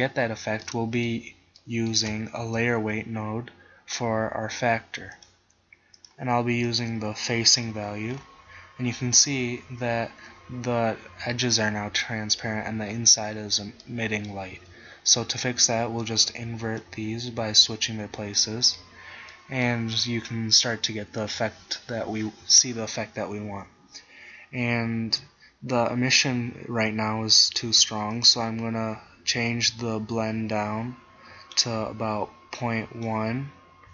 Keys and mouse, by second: 0.7-1.9 middle drag, 2.5 shift+a, 8.3-13.5 drag, 13.9-17.5 drag, 18.5 click, 21.6-28.2 middle drag.